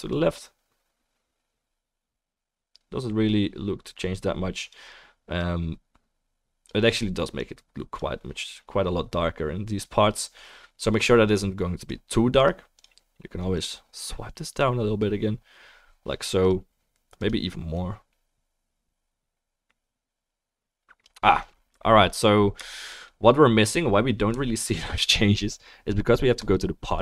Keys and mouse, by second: 12.1 click, 12.1-15.7 middle drag, 12.1-27.0 right drag, 13.6 click, 16.4 click, 17.2 click, 26.4 click.